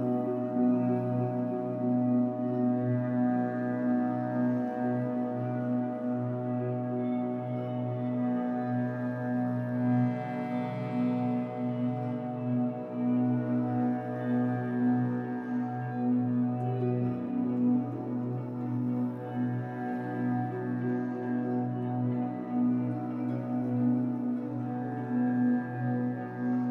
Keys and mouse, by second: 1.1-1.9 drag, 3.5-5.1 drag, 6.9 click, 8.7 click, 9.9 i, 11.4 click, 11.8 click, 13.1 Right, 13.3 Right, 13.5 Right, 14.9 click, 17.4 Right, 18.7-20.1 drag, 20.7 shift+click, 20.8 shift+d, 21.3-26.7 shift+drag, 21.6 shift+d, 22.3 shift+d, 23.4-24.0 typing.